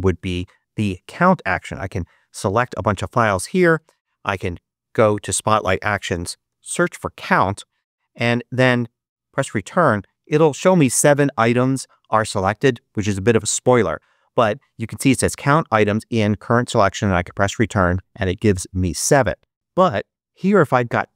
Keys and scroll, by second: 3.7 super+space, 4.2 super+3, 5.9-7.2 typing, 8.5 Return, 16.9 Return.